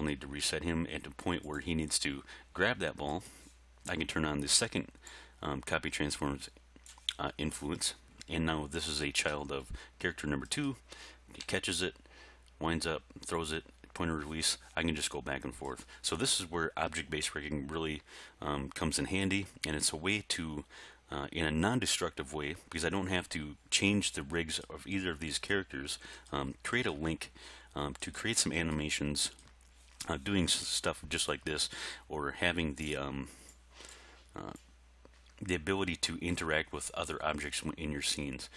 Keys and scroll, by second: 0.4 r, 11.5 r.